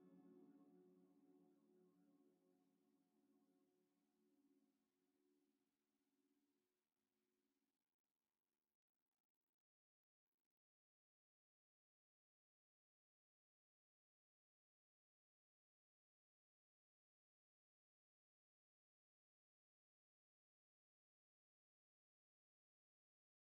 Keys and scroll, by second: 8.7 1, 11.0 Return, 12.6 a, 15.6 2, 20.6 q.